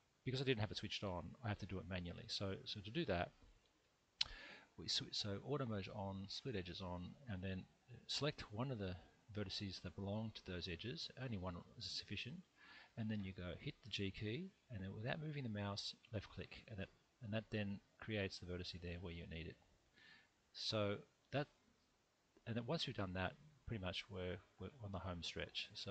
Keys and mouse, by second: 3.1 1, 3.9 middle click, 11.3 click, 14.1 g, 16.2 click, 17.7 click, 18.3-20.2 middle drag, 22.0 middle click.